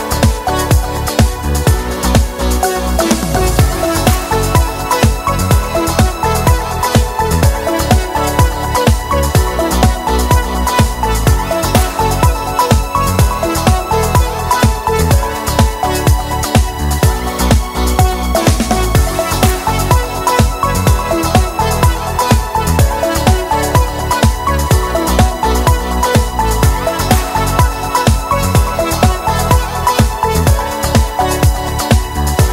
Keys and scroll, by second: 10.6 u, 17.8 v.